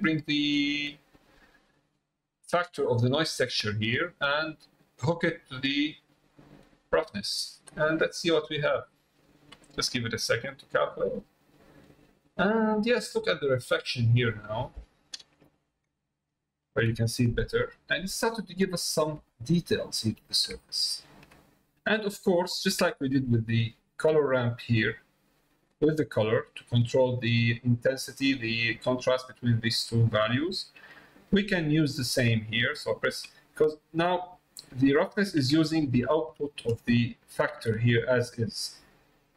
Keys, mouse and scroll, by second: 0.5-6.6 drag, 11.0 middle click, 12.8 middle click, 15.9 shift+middle click, 19.2 shift+middle click, 20.6 shift+middle click, 21.6 middle click, 23.0 click, 24.1 middle click, 24.8 click, 26.2 click, 30.7 middle click, 37.0 ctrl+shift+click.